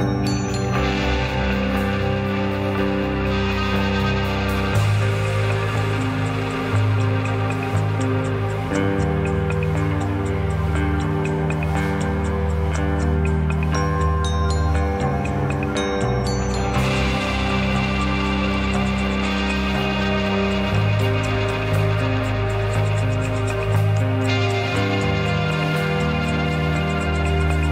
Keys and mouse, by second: 0.2 middle click, 1.0-1.7 drag, 3.1 click, 4.5 click, 5.5 click, 6.8 click, 8.0 a, 11.3 middle click, 11.9 click, 12.1-12.9 shift+drag, 14.4-14.9 drag, 16.4 click, 17.3 click, 17.7 a, 18.3-19.6 drag, 19.9 shift+click, 20.3 click, 23.1 click, 24.3 click, 25.8-26.5 shift+middle drag, 27.4 middle click.